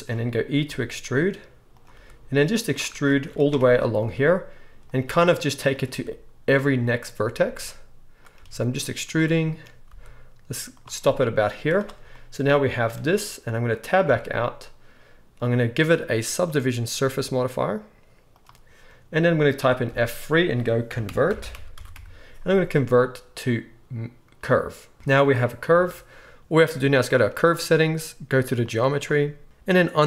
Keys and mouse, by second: 0.5-12.9 drag, 0.6 e, 1.9 e, 4.0 e, 5.0-8.3 typing, 9.8 e, 11.5 z, 12.9-16.3 right drag, 14.0 Tab, 16.3-27.2 middle drag, 19.9 F3, 25.1 Tab, 25.7 Tab, 27.2-28.7 right drag, 28.7-30.0 middle drag.